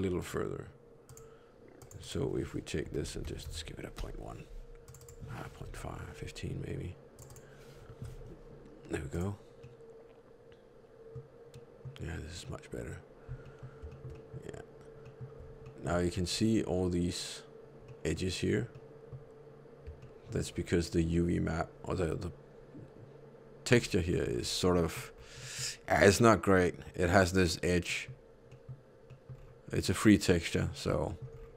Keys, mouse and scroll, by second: 0.1 right click, 1.9 click, 2.9 Left, 4.9 click, 9.5 middle click, 11.5 middle click, 13.3 middle click, 13.8 shift+middle click, 14.0 shift+middle click, 15.0 middle click, 15.3-16.1 scroll up 3, 15.5 shift+middle click, 17.8 middle click, 17.8 scroll up 3, 18.6 middle click, 19.9 shift+middle click, 20.4 scroll down 3, 23.7-24.0 scroll up 3, 24.0 middle click, 24.3-25.2 scroll up 3, 24.7 middle click, 25.3 middle click, 25.5-26.3 scroll down 1, 27.8 middle click, 28.5 middle click, 29.2 middle click, 29.2-30.5 scroll down 3, 29.6 middle click, 31.0 middle click, 31.3-31.5 scroll up 5.